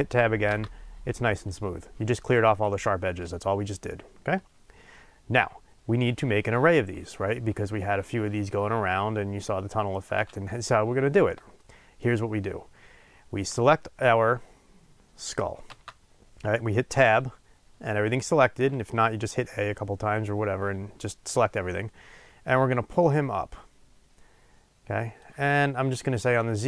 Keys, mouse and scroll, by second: 0.4 Tab, 4.9 scroll down 1, 10.6-22.9 shift+middle drag, 12.2-15.6 scroll up 2, 15.6 Tab, 22.9-26.6 drag.